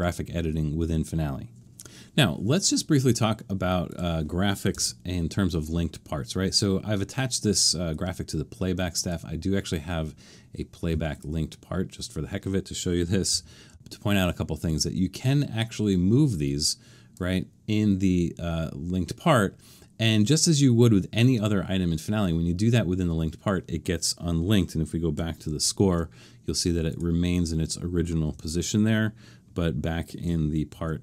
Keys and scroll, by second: 3.4 Escape, 4.7 BackSpace, 13.3 super+=, 13.7 super+=, 25.5 alt+super+/, 28.4 super+=, 30.7 alt+super+/.